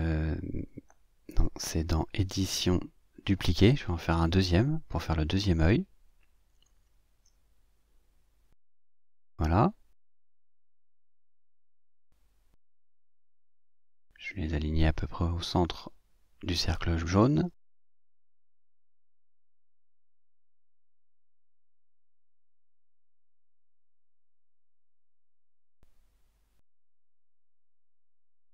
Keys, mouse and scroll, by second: 5.0 click, 7.5-10.4 drag, 12.8 click, 13.1 click, 13.8 Left, 14.9 Right, 20.0 click, 23.2 click, 25.7 ctrl+scroll down 2, 26.2-27.0 ctrl+scroll up 5.